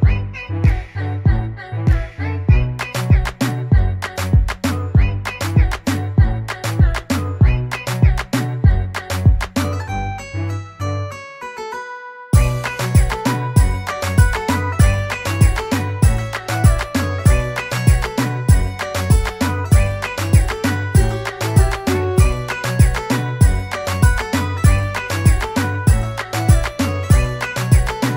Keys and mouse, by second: 1.9 click, 3.5 click, 12.8 click, 14.2 click, 15.9 click, 18.1 click, 19.7 click, 22.2 click, 23.4 click.